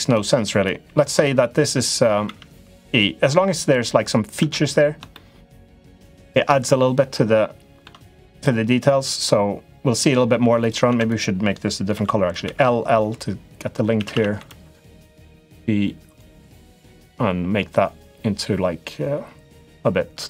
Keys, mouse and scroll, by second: 0.5 click, 2.0 e, 4.1 Tab, 5.0 shift+middle click, 6.0-7.6 middle drag, 8.1 click, 8.8-10.0 middle drag, 10.3 click, 10.6 Tab, 10.8 click, 11.7 l, 12.2 l, 13.7 a, 13.9 a, 14.1 b, 14.9 g.